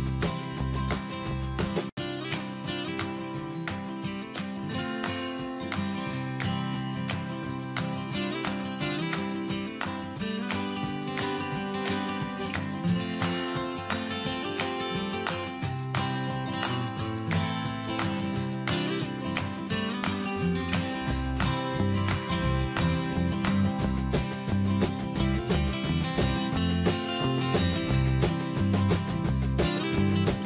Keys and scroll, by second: 10.6 alt+Tab, 13.1 ctrl+c, 15.9 ctrl+v, 17.2 Escape, 20.8 alt+Left, 22.4 Return, 23.5 alt+Tab, 25.6 ctrl+c, 26.8 ctrl+v, 30.1 Escape.